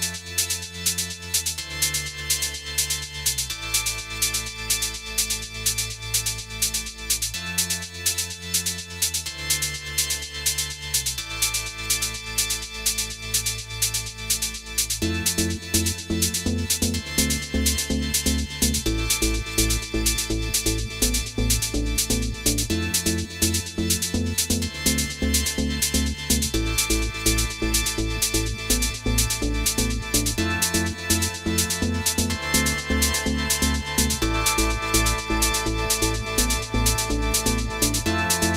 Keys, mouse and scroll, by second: 1.9 shift+middle click, 2.6 Tab, 2.9 click, 3.2 Tab, 4.5 click, 5.0 click, 5.6 alt+click, 6.2 ctrl+b, 8.6 scroll down 1, 9.5-9.9 scroll down 2, 9.9 middle click, 11.4 ctrl+click, 11.9 click, 12.3 ctrl+click, 13.3 ctrl+b, 14.3 middle click, 14.6 scroll up 2, 15.2 ctrl+click, 15.9 alt+click, 16.6 ctrl+b, 17.4 middle click, 18.5 click, 19.1 alt+click, 19.7 ctrl+b, 21.1 middle click, 21.6 click, 22.0 alt+click, 22.6 ctrl+b, 25.5 click, 26.1 middle click, 26.9 click, 27.1 middle click, 27.9 alt+click, 28.5 ctrl+b, 29.6 middle click, 30.1 scroll down 1, 30.3 middle click, 30.7-31.1 scroll down 1, 31.5 click, 32.3 scroll up 1, 32.8 alt+click, 33.5 middle click, 33.6 ctrl+b, 34.8 middle click, 35.5 click, 35.8 alt+click, 36.4 ctrl+b, 37.6-38.0 scroll down 2, 37.7 middle click, 38.4 shift+middle click.